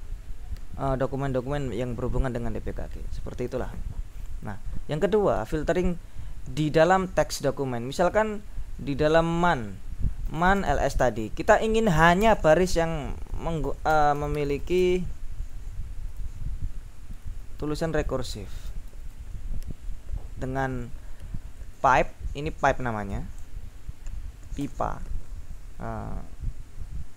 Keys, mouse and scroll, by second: 1.4-3.4 scroll down 3, 3.6 ctrl+l, 10.1-12.4 typing, 13.5-15.2 typing, 17.1-19.7 typing, 21.9 Left, 23.6 ctrl+Right, 24.7 ctrl+BackSpace.